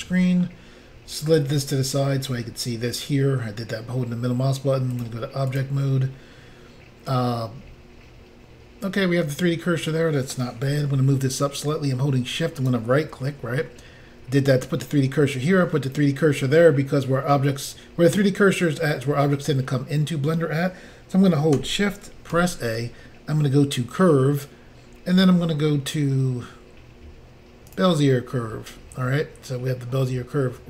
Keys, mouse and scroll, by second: 4.9 click, 5.0 click, 5.5 click, 5.6 click, 12.6 shift+right click, 22.4 a, 27.7 click.